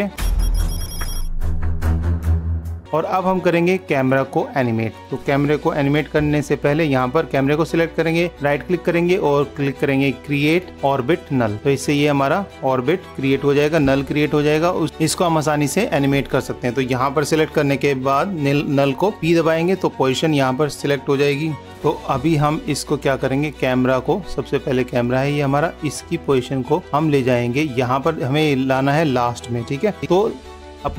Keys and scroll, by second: 14.2 super+-, 22.7 super+=.